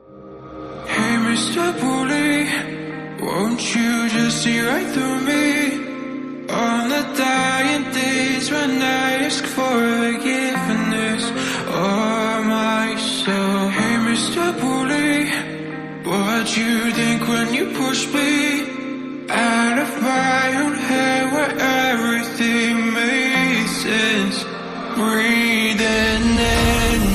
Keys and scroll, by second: 1.5 space, 5.6-8.5 typing, 6.1 Caps_Lock, 22.7 e, 22.9 ctrl+a, 25.0 ctrl+a, 25.4 ctrl+d.